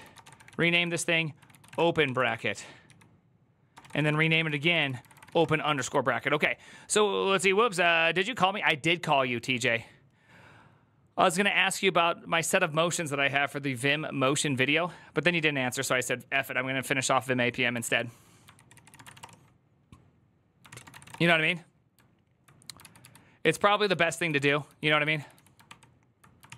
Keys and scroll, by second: 0.0-5.0 typing, 2.0 ctrl+c, 5.2 Return, 17.7 alt+{, 18.3 ctrl+c, 18.5 ctrl+c, 18.6-19.4 typing, 20.4 ctrl+c, 20.7 typing, 22.6 ctrl+u, 22.8 ctrl+u, 23.4-26.5 typing, 26.2 ctrl+c, 26.4 ctrl+c.